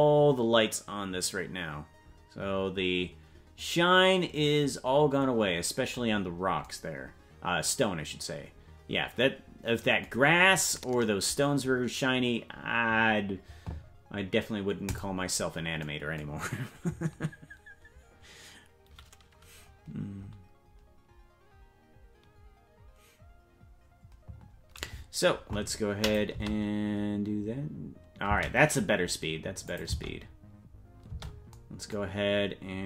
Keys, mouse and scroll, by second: 6.1-6.7 scroll down 4, 11.5-12.5 scroll up 3, 12.5-14.8 scroll up 2, 14.8 click, 26.0 click, 26.3 space, 28.5 space, 29.6 click, 29.8 space, 31.5 space, 32.1-32.8 scroll down 4.